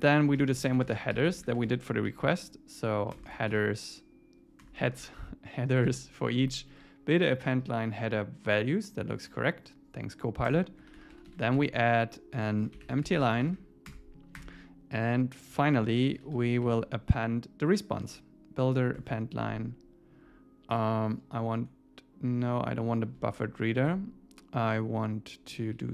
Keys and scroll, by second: 5.9 Tab, 10.5 Return, 13.9 Return, 19.0 Tab, 23.7 Left, 25.5 Left, 25.8 Right.